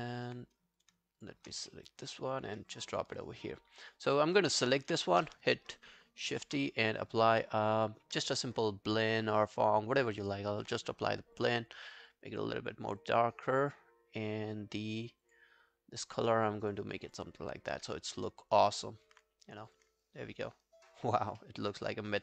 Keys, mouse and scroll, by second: 0.2 alt+right click, 1.2 shift+click, 1.7 middle click, 2.8 alt+right click, 4.2 alt+middle click, 4.4 alt+scroll down 1, 4.6 alt+click, 17.1 double click, 17.4-18.1 scroll up 1, 18.3 alt+click, 18.8 alt+right click, 20.0 alt+click, 21.4 alt+middle click, 21.6 alt+right click, 21.9 alt+click.